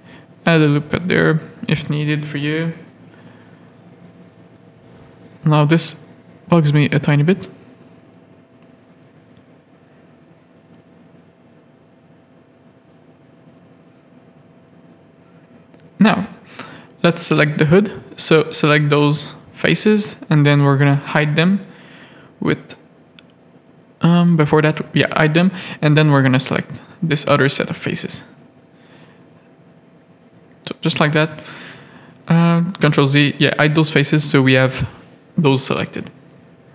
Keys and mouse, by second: 0.1 Tab, 0.4 middle click, 1.2 alt+a, 1.6 middle click, 3.0 middle click, 3.6 Tab, 4.2 z, 4.5 a, 5.3 z, 5.9 click, 6.2 g, 8.1 g, 9.7 Tab, 10.8 middle click, 11.4 z, 13.0 middle click, 13.9 middle click, 14.1 Tab, 14.3-15.4 middle drag, 15.9 3, 16.4 click, 16.8 middle click, 17.9 ctrl+click, 18.4 middle click, 20.8 middle click, 21.7 KP_3, 22.4 shift+middle click, 24.4 h, 25.5 middle click, 28.2 h, 28.5 z, 28.8 a, 30.4 ctrl+z, 30.8 ctrl+z, 32.1 click, 33.1 middle click, 34.3 h, 35.2-36.4 middle drag.